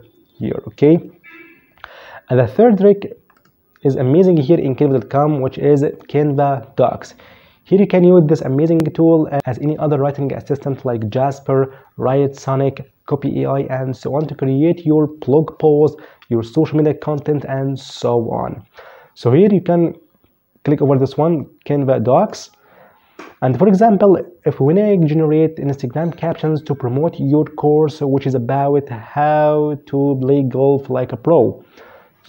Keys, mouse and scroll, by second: 2.5 click, 21.3 click, 31.4 click.